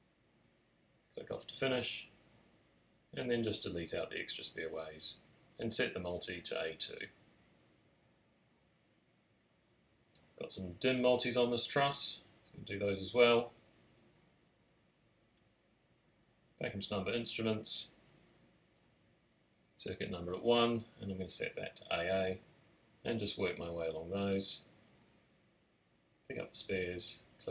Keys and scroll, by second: 3.0 BackSpace, 7.4 a, 7.7 2, 7.9 Return, 9.6 space, 11.3 space, 12.4 space, 16.3 alt+shift+super+n, 17.4 Tab, 19.3 a.